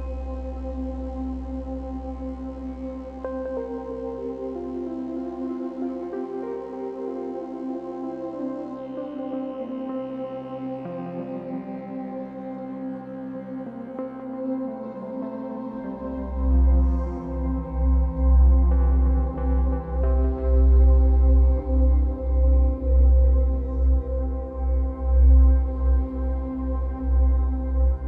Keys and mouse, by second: 1.1 space, 1.4 click, 1.7 space, 3.1 space, 3.9-11.6 drag, 16.6-18.4 drag, 20.8 g, 21.2 g, 21.5 click, 22.7 click, 23.0 typing, 23.8 shift+click, 24.0 shift+click, 25.3 typing, 25.7 click, 26.5 shift+click, 26.7 shift+click, 27.8-28.0 typing.